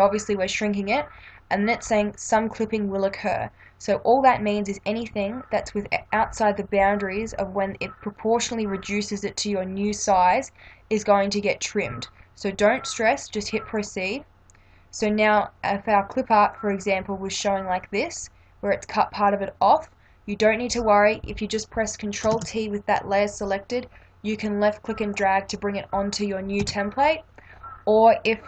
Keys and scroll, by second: 22.3 ctrl+t, 26.6 Return.